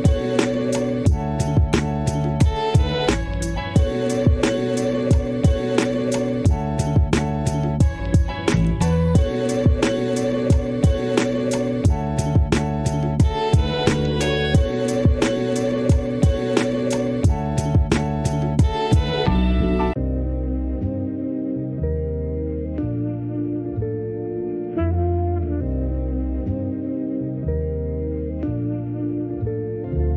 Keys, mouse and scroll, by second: 0.4 s, 0.8 click, 1.0 s, 2.0 click, 2.1 e, 4.4 click, 4.7 g, 5.2 click, 5.3 e, 5.7 e, 6.0 s, 7.2 scroll up 1, 7.5 click, 7.7 g, 9.1-10.4 drag, 10.7 Escape, 10.9 click, 12.5 click, 12.6 r, 13.4 g, 15.0 shift+d, 15.9 click, 16.7 g, 17.2 Tab, 17.8 click, 18.6 s, 19.1 click, 19.3 s, 20.1-21.5 shift+middle drag, 21.5 ctrl+r, 22.3 ctrl+r, 23.4 click, 23.5 s, 24.2 click, 24.7 s, 24.9 click, 26.0-27.4 drag, 27.6-28.6 drag, 28.7 click, 29.6 ctrl+a.